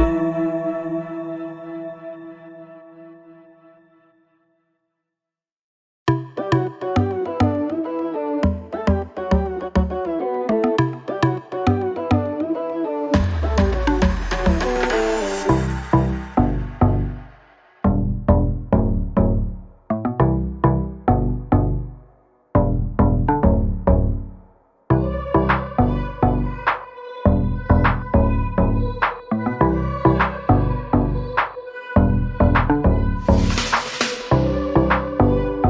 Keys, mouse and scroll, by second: 7.5 scroll down 1, 7.9-9.1 alt+scroll up 2, 9.1 click, 13.3 ctrl+z, 13.8 click, 15.3 ctrl+click, 16.0-16.7 alt+scroll down 3, 17.2-18.7 scroll up 1, 18.7-19.4 scroll up 1, 19.7 alt+Num_Lock, 19.9 scroll up 1, 21.6 click, 22.0 scroll down 1, 23.6 click, 30.0 z, 31.0 click, 34.9 z.